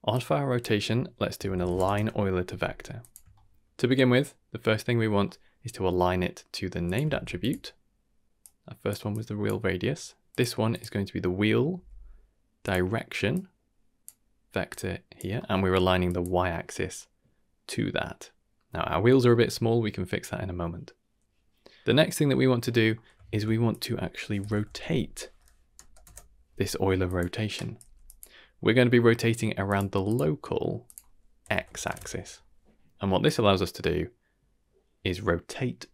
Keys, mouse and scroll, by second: 0.1-3.0 drag, 3.3 shift+middle click, 5.2 middle click, 6.8 click, 7.0 shift+d, 8.4 click, 9.1 click, 9.8 middle click, 10.3 click, 10.7-12.7 drag, 13.3-14.0 drag, 14.7 click, 15.3 middle click, 16.0 click, 16.8-18.6 middle drag, 19.3 middle click, 21.8 ctrl+x, 21.8 middle click, 21.8 click, 21.8 scroll up 2, 22.4 middle drag, 22.9 middle click, 23.2 shift+a, 24.7 t, 28.5-29.1 scroll up 3, 28.9 middle click, 29.6 click, 30.0 click, 30.8-31.9 drag, 31.6 Tab, 33.2-35.9 drag.